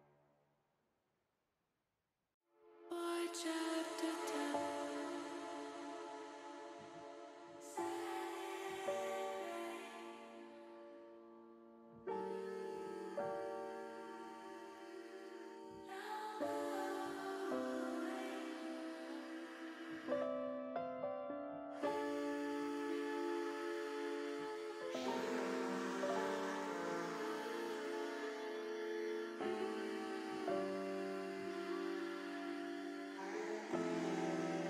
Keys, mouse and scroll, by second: 0.4 e, 1.6 click, 2.0 middle click, 4.8 click, 6.9 click, 8.1 click, 9.3 alt+shift+click, 10.8-11.9 drag, 13.6 ctrl+z, 14.2 alt+shift+click, 14.8 alt+shift+click, 16.4 click, 18.6 click, 19.4 alt+shift+click, 21.1-22.5 drag, 23.3 click, 24.0 alt+shift+click, 24.5 alt+shift+click, 25.4-26.9 drag, 27.8 ctrl+z, 28.5 click, 30.7 alt+shift+click, 31.9-33.0 drag.